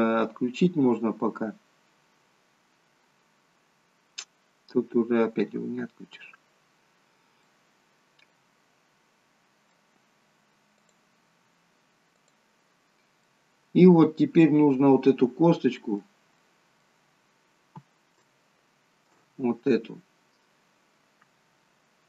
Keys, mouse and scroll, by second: 2.9 scroll up 1, 5.4-5.8 scroll down 2, 7.5 middle click, 10.8 click, 12.3 click, 12.9-13.3 scroll up 3, 13.3 middle click, 16.5 middle click, 17.0-18.3 scroll up 2, 18.3 shift+middle click, 18.3 scroll up 1.